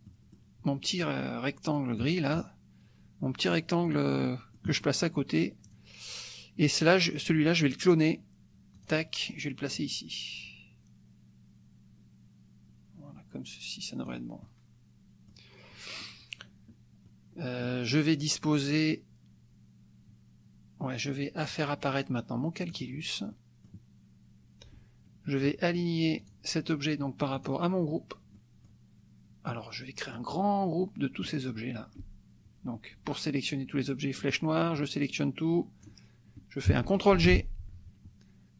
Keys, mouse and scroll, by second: 0.1 click, 1.0-2.2 drag, 2.4-3.7 drag, 3.8 click, 4.3 click, 5.6 click, 8.8 click, 9.8-14.3 drag, 14.5-15.5 drag, 15.7 click, 17.1 click, 22.8 click, 23.3 click, 26.2 click, 27.4 click, 28.4 click, 30.1-31.5 drag, 34.2 click, 34.8-36.1 drag, 37.1 ctrl+g.